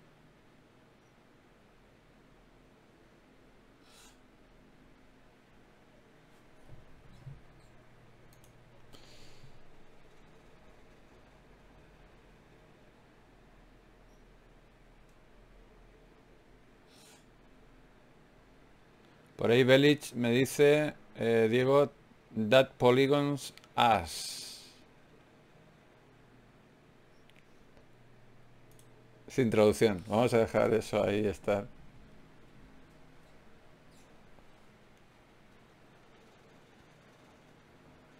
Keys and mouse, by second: 0.2 right click, 6.0 d, 6.2-8.2 drag, 6.2 right click, 8.9 shift+q, 12.7 ctrl+Tab, 13.8 click, 14.4 f, 20.7 Tab, 21.9 f, 22.7-24.3 drag, 23.5 Tab, 25.3-28.7 drag, 27.0 g, 28.0 g, 28.7 a, 32.0 s, 33.9 ctrl+Tab, 35.2 g, 37.0 click, 38.0 g.